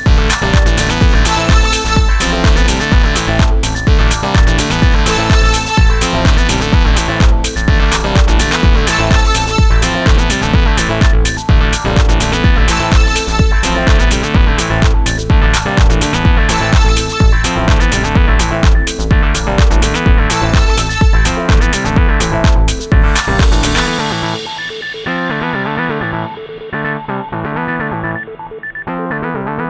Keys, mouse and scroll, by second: 2.3 Tab, 4.2 a, 5.5-7.2 drag, 7.7 ctrl+z, 8.3 Tab, 13.1 Tab, 14.5-15.7 middle drag, 17.1 a, 21.9 Tab, 23.7-24.1 middle drag, 24.8-25.4 middle drag, 25.6-26.1 middle drag.